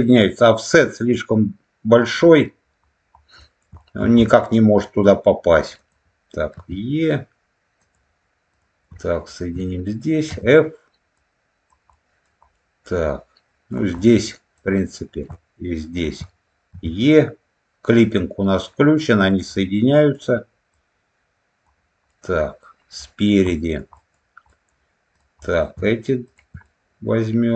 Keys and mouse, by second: 3.3 middle click, 3.7 shift+middle click, 4.1 middle click, 5.7 click, 6.4 e, 7.7 click, 8.4 click, 9.2 shift+click, 10.2 f, 11.1 click, 11.8 middle click, 12.5-13.6 middle drag, 13.9 middle click, 14.4 click, 15.8 shift+click, 16.6 e, 19.1 click, 19.5 middle click, 20.6 click, 22.0 middle click, 23.0 middle click, 23.4 middle click, 23.9 middle click, 24.4 middle click, 25.0 click, 25.3 middle click, 26.2 shift+click, 26.5-27.5 middle drag.